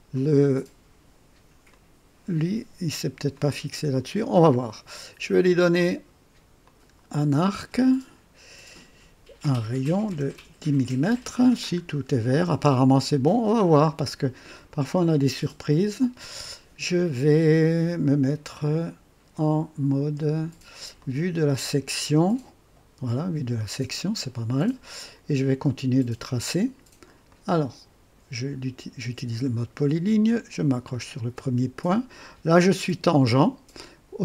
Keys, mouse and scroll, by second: 0.1 right click, 1.6-2.7 drag, 3.3-4.1 drag, 5.4 click, 6.6 click, 9.8 KP_1, 10.0 KP_0, 10.3 KP_Enter, 11.6-12.0 scroll up 1, 12.7 scroll down 1, 20.9 click, 27.2 click, 30.8 click.